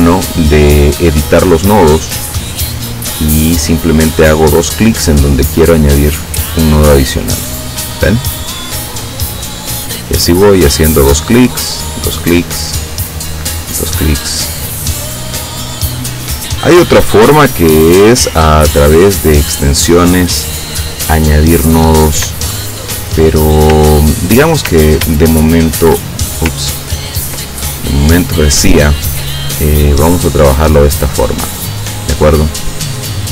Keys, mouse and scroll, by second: 1.8 click, 5.9 click, 8.5 click, 10.2 click, 11.5 click, 13.2 click, 14.4 click, 15.9 click, 17.7 click, 20.0 click, 21.5 click, 22.4 shift+click, 24.0-25.1 ctrl+scroll down 3, 25.2 ctrl+shift+click, 26.8 ctrl+scroll down 2, 27.8-28.8 ctrl+drag, 30.7 click, 32.2 click.